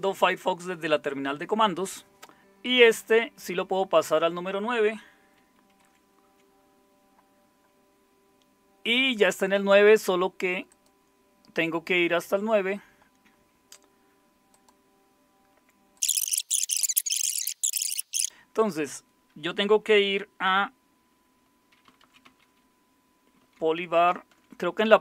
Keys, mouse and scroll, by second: 5.8 shift+super+), 21.6-24.7 typing.